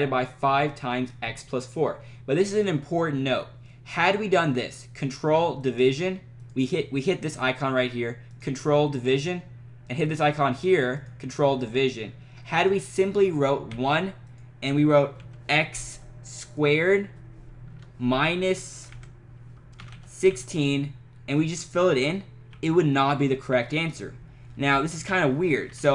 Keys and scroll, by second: 13.7 1, 15.1 x, 17.7 Right, 18.9 Left, 19.6-20.7 typing, 22.5 5, 24.8 x, 25.1 -, 25.7 4.